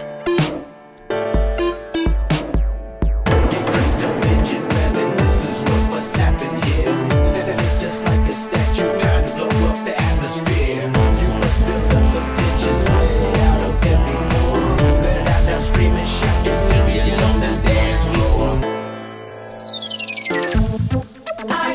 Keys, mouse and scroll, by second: 0.9 Escape, 1.8 click, 7.2 alt+click, 9.1-11.4 drag, 14.7 click, 15.4 click, 16.7 click, 17.8 click, 18.9 click, 19.6-21.7 typing.